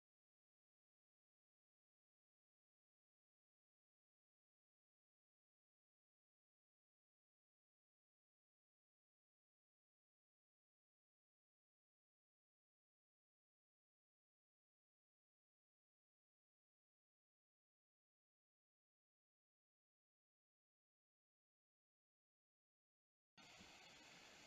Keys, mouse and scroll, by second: 0.8 space, 1.7 r, 4.7 space, 7.2 click, 8.5 click, 10.0 click, 11.9 click, 13.4 middle click, 14.3 shift+middle click, 16.7 click, 18.9-22.0 middle drag, 22.4 shift+middle click.